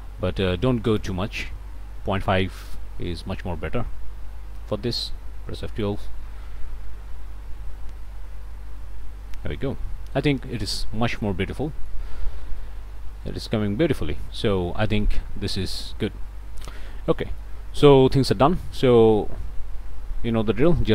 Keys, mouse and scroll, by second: 0.9 click, 2.0 KP_Decimal, 2.1 KP_5, 2.5 KP_Enter, 5.7 F12, 9.3-10.8 middle drag, 10.8 click, 10.9 scroll down 2, 11.1 click, 11.2 middle click, 12.1 click, 12.1-12.4 scroll up 2, 12.6-14.1 middle drag, 14.1 scroll down 2, 14.6 middle click, 17.1 click, 18.7 click.